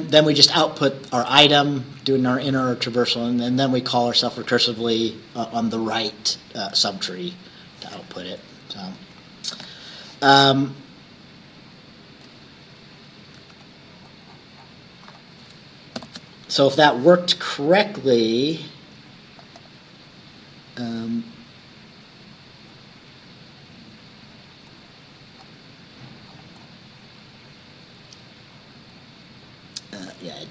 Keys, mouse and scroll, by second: 8.0 click, 9.6 ctrl+s, 13.5 ctrl+s, 13.9-14.9 ctrl+scroll down 2, 16.0 ctrl+shift+b, 19.5 click, 21.1-21.6 scroll down 2, 22.0 scroll down 2, 22.8-23.1 scroll up 2, 24.2-24.6 scroll up 1, 24.9 scroll up 1, 25.4 scroll down 1, 26.3 scroll up 1, 28.6-28.9 scroll up 1, 30.1-30.5 drag.